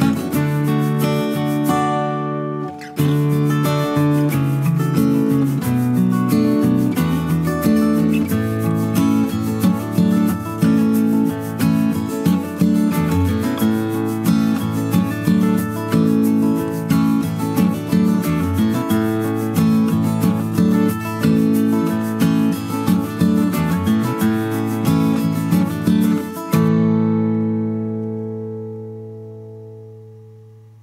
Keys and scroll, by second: 21.4 ctrl+x, 22.8 ctrl+v, 27.9 Right, 28.5 Down, 28.8 Right, 28.9 Down.